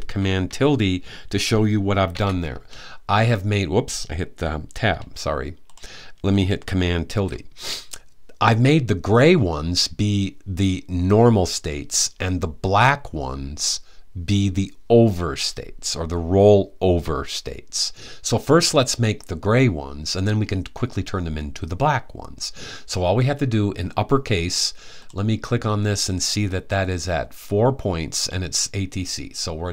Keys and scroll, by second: 6.8 super+`.